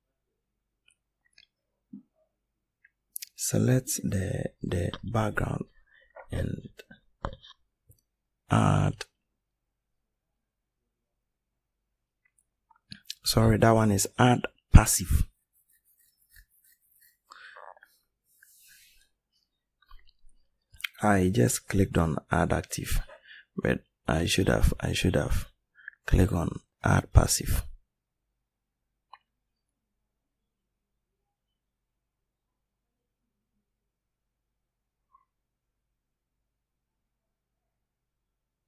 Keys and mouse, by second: 35.0 right click.